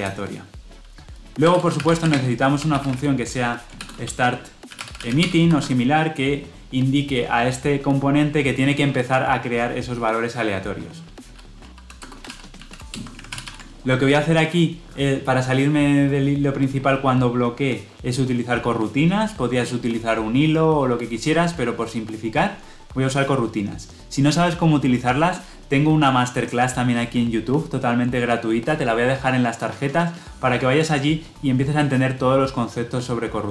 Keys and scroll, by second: 13.2 ctrl+alt+l, 13.4 ctrl+alt+o.